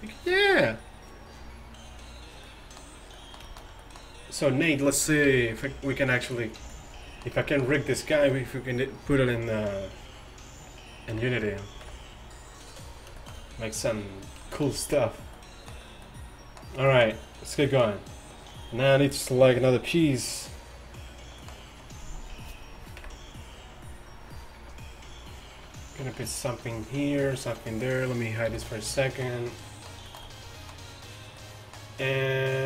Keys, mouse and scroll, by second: 3.6-6.3 middle drag, 4.6-5.5 right drag, 5.3 t, 6.4-7.1 drag, 6.7 t, 7.3 drag, 11.2 KP_1, 11.9 KP_5, 13.0-13.5 middle drag, 23.1 KP_1, 27.8-28.1 right drag, 28.2-28.8 right drag, 28.6 h, 28.8-29.9 middle drag, 30.5-31.6 middle drag, 31.6 middle click.